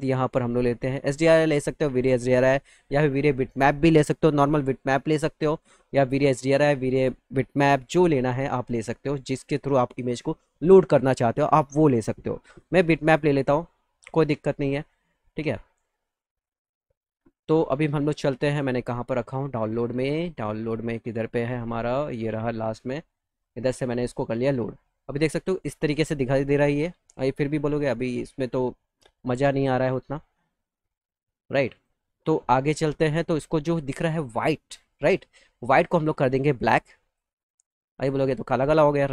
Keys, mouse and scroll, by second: 2.6 click, 5.8 middle click, 6.0 middle click, 6.3 middle click, 7.2 middle click, 7.5 middle click, 7.5 click, 8.2 middle click, 8.4 middle click, 8.6 middle click, 8.8 middle click, 12.3 click, 12.9 click, 13.1 click, 18.4 click, 19.5 click, 19.6 click, 20.4 middle click, 20.6 scroll down 2, 20.7 middle click, 22.1 click, 23.2 click, 31.6 click, 35.4 click, 36.6 click, 38.4 click.